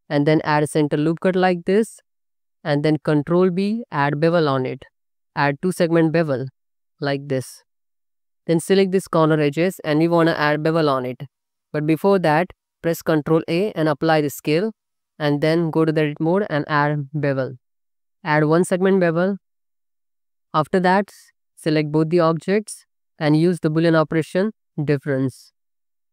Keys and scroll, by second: 0.6 ctrl+r, 2.0 2, 2.9 ctrl+b, 7.1 alt+z, 8.5 alt+z, 11.4 ctrl+b, 12.6 Escape, 12.9 Tab, 13.4 ctrl+a, 15.1 Tab, 16.4 ctrl+b, 19.5 5, 20.1 Tab, 21.3 alt+z, 22.9 n.